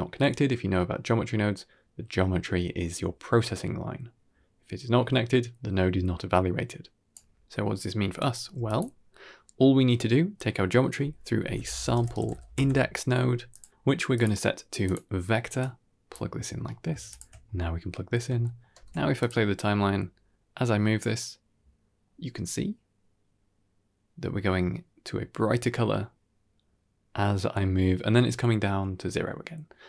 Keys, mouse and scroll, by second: 6.7-7.2 drag, 8.1 drag, 8.3 g, 10.3-13.5 drag, 13.7-14.0 scroll up 6, 14.0-14.8 drag, 15.5-16.0 drag, 16.4-16.8 scroll down 2, 16.5 middle click, 17.0 ctrl+shift+click, 17.5-18.1 scroll down 1, 18.1 scroll down 1, 18.3 shift+middle click, 18.6 shift+space, 19.1 click, 19.5 g.